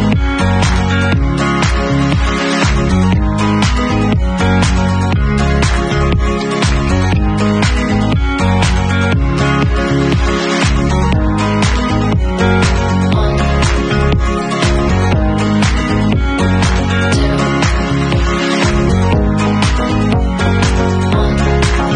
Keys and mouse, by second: 6.3-7.7 ctrl+middle drag, 6.5 ctrl+s, 7.7-9.8 drag, 9.8-15.0 middle drag, 15.0-19.4 drag, 19.4-21.9 middle drag.